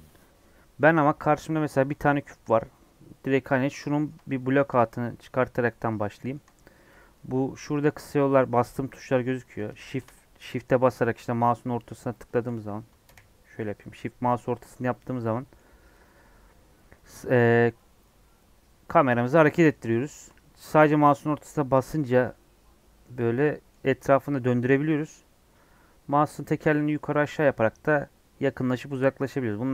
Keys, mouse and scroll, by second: 1.9-13.0 shift+middle drag, 13.0 KP_1, 13.7-22.0 shift+middle drag, 22.0 scroll down 1, 22.2-24.4 middle drag, 24.4-24.8 scroll down 1, 24.8-25.3 scroll up 3, 25.3-26.7 scroll down 1, 26.7-27.1 scroll up 4, 27.1-28.4 scroll down 5.